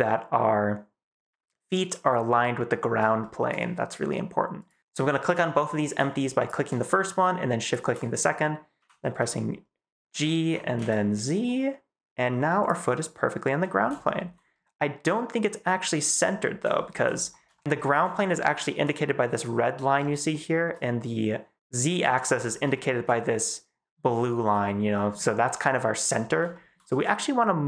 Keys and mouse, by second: 3.1 shift+click, 8.7 g, 9.0 x, 10.3 y, 10.7 z, 12.5 click, 14.0 shift+middle click, 16.6 shift+middle click, 17.4 shift+click, 18.4 shift+middle click, 20.2-20.5 shift+middle drag, 22.7 shift+drag, 24.5 shift+click.